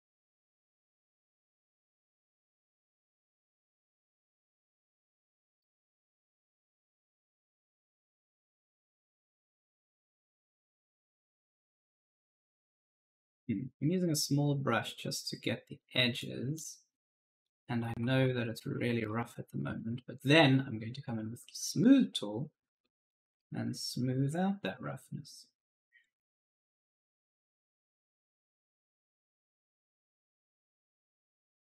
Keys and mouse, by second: 1.3 click, 2.8 click, 5.3-6.7 typing, 5.4 right click, 7.0 click, 7.9-9.9 typing, 8.1 right click, 9.6 click, 13.0-13.7 typing, 13.0 right click, 13.9 click, 15.9 right click, 16.4 click, 17.4-18.7 typing, 17.6 right click, 20.1 click, 21.6 click, 22.9-23.6 typing, 23.0 right click, 23.5 click, 30.5-31.6 typing, 30.6 right click.